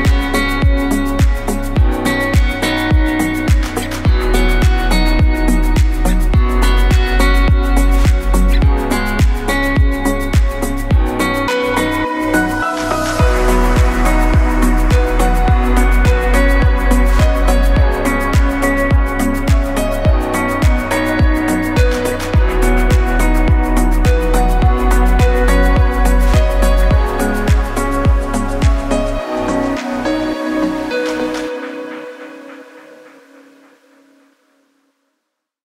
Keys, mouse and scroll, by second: 0.0 scroll down 1, 0.5 scroll down 2, 4.2 click, 6.5 click, 21.5 click.